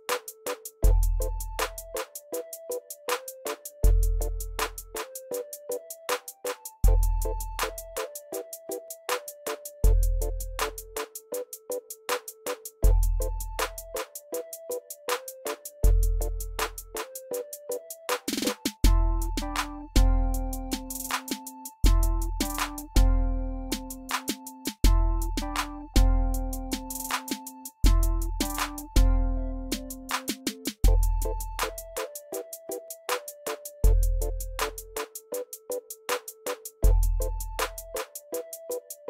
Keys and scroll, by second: 6.4 space, 14.0 ctrl+c, 18.6 ctrl+f, 21.5 ctrl+f.